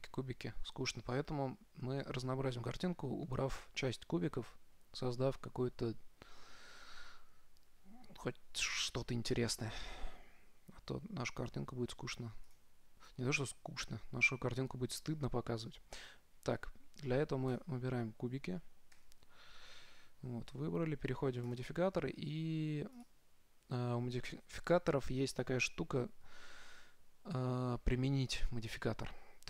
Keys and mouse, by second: 12.8-14.6 drag, 17.8-19.7 right drag, 19.4 z, 19.5 z, 21.8-23.7 drag.